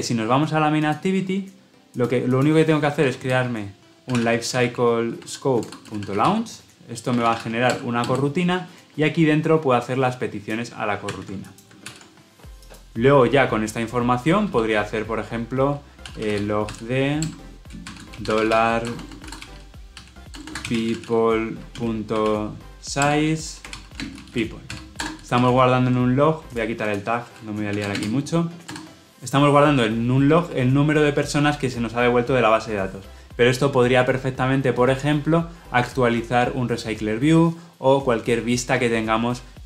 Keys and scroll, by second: 11.0 ctrl+x, 11.7 ctrl+v, 17.2 Return, 22.9 Return.